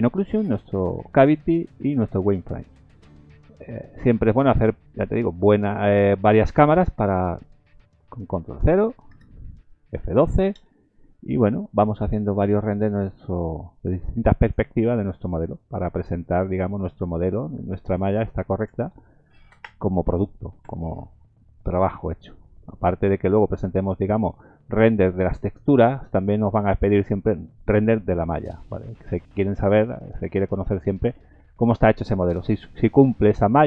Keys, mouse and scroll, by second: 4.2 middle click, 4.5-4.9 scroll down 4, 4.9 middle click, 5.3-5.9 scroll down 2, 7.0 click, 9.1 ctrl+KP_0, 10.7 F12.